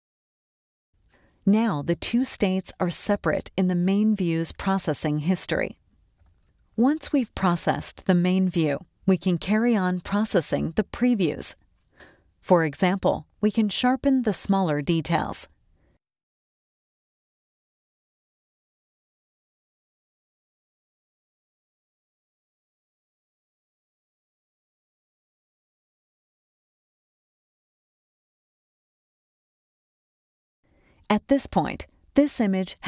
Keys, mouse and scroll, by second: 1.3 click, 6.6 click, 7.5 click, 8.8 click, 15.5 click, 17.3 click, 18.1 click, 18.9 click, 19.8 click, 21.2 click, 24.6 click, 25.1 scroll down 2, 25.6 click, 25.6 space, 27.7 click, 28.4 click, 29.1 click, 29.9 click.